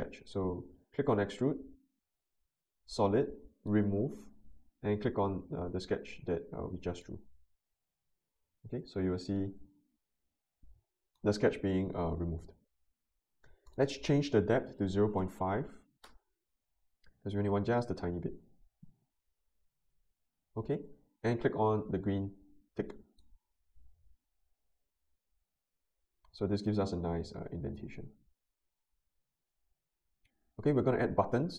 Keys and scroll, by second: 14.5-15.7 typing, 16.0 Return.